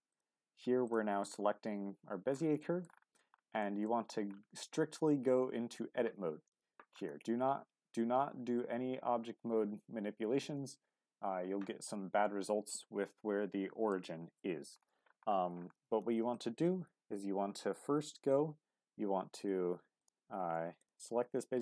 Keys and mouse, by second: 2.6 shift+middle click, 3.6 shift+middle drag, 13.9 click, 20.0-21.6 drag.